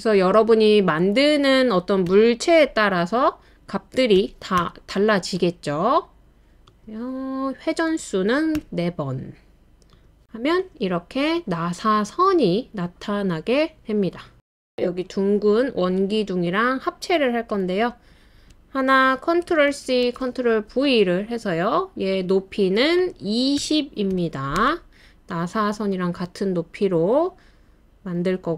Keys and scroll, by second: 2.1 typing, 4.2-4.6 typing, 8.6 typing, 19.7 super+c, 20.0 super+v, 23.6-24.1 typing, 24.6 Return.